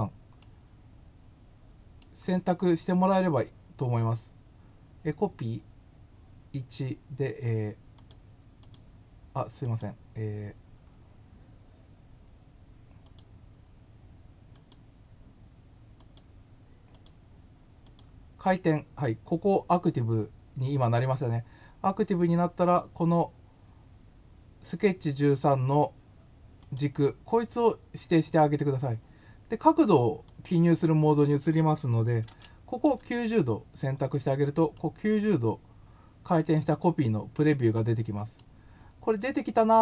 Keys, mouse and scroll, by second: 0.4-2.0 middle drag, 7.9 click, 8.6 click, 9.6 click, 10.9 scroll up 1, 13.0 click, 14.5 click, 15.9 click, 16.9 click, 17.8 click, 26.6 click, 30.2 click, 34.7-36.3 middle drag.